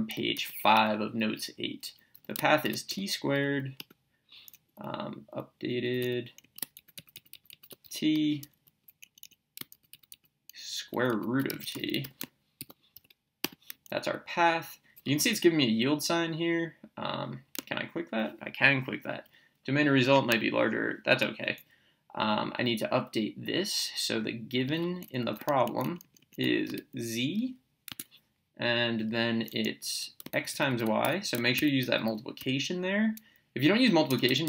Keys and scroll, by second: 1.9-3.4 typing, 3.8 Return, 5.3 Down, 5.8 Left, 6.4 Right, 7.8 t, 8.1 Return, 8.7 Down, 9.0 Right, 11.3-12.9 typing, 13.4 Return, 21.4 Up, 25.2 Left, 26.6 z, 27.9 Tab, 31.0 x, 31.5 *, 32.4 y, 34.1 BackSpace.